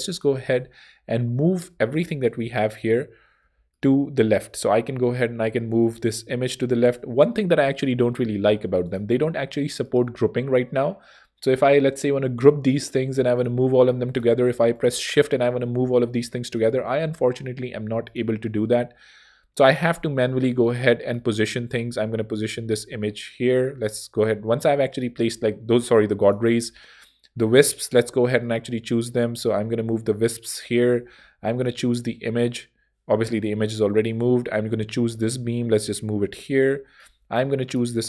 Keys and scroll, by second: 6.6 super+z, 8.6 shift+super+z, 13.1 ↺, 15.8 shift+super+z, 16.5 super+z.